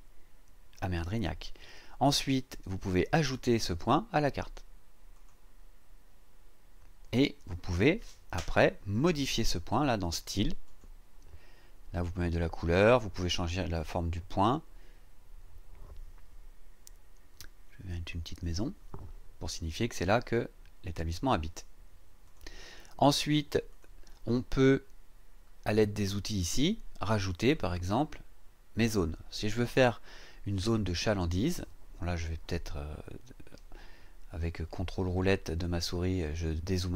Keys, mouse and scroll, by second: 5.1 click, 10.6 click, 18.4 click, 22.2 click, 23.7 click, 32.9-33.3 ctrl+scroll down 2.